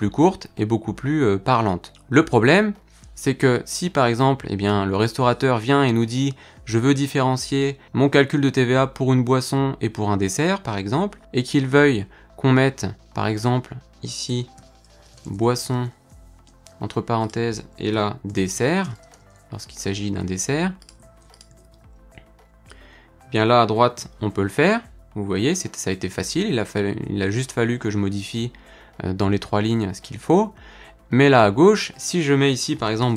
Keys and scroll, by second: 24.0 ctrl+F5.